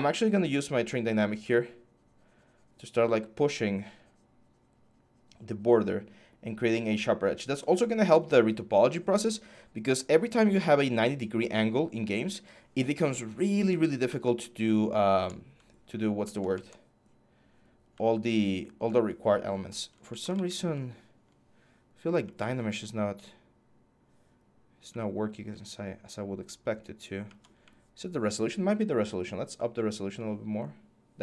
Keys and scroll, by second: 19.6 ctrl+z, 20.1 ctrl+z.